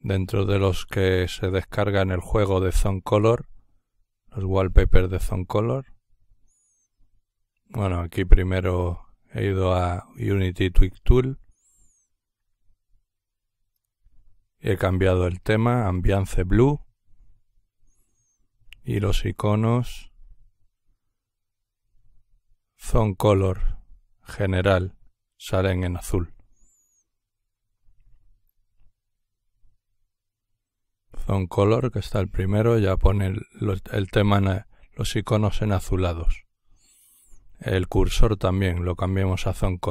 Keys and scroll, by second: 6.9 t.